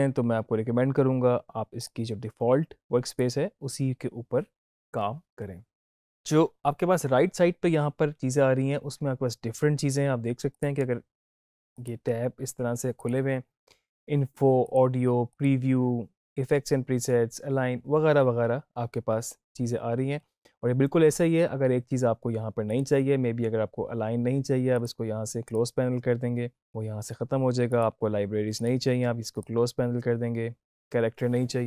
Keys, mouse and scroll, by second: 1.8 click, 10.5 click, 22.7 click.